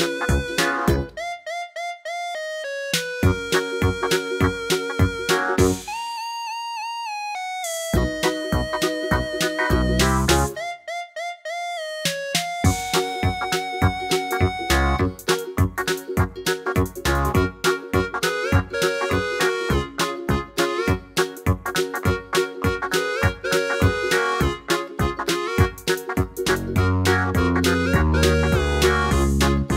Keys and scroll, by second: 1.1 Left, 1.3 Left, 1.5 Right, 1.6 Right, 10.1 5, 10.2 5, 10.5 Return, 20.3-21.9 typing.